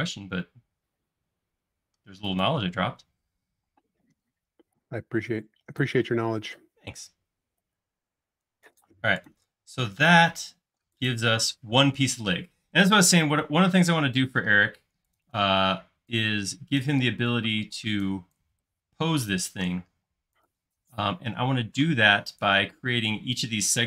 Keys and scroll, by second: 3.7 space, 9.6 space, 15.7 e, 19.9 space.